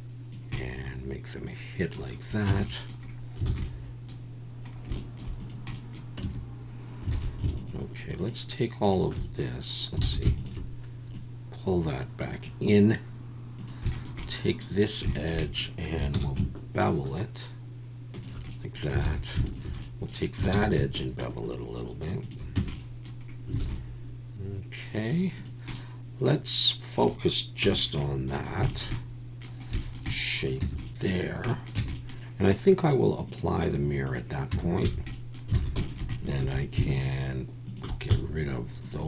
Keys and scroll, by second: 2.5 Tab, 3.5 alt+a, 6.2 Tab, 7.1 alt+a, 10.0 alt+a, 16.1 ctrl+b, 19.0 alt+a, 20.5 ctrl+b, 22.5 Tab, 23.6 alt+a, 27.6 /, 30.6 Tab, 31.8 Tab, 34.5 Tab, 34.8 a, 35.6 alt+a, 36.4 2, 38.1 x.